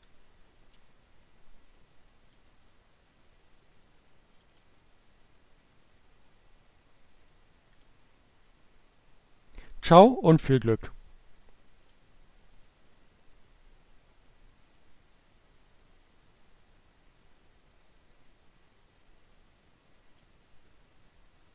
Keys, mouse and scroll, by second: 1.3 click, 3.4 click, 5.6-6.9 drag, 10.8 click, 18.6 click.